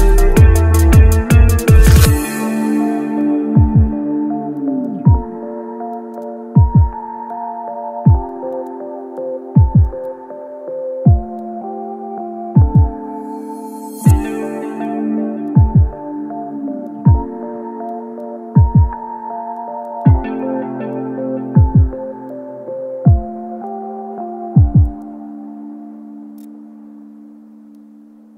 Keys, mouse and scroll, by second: 0.1-0.4 scroll up 1, 9.2 shift+click, 23.8-25.9 scroll down 1.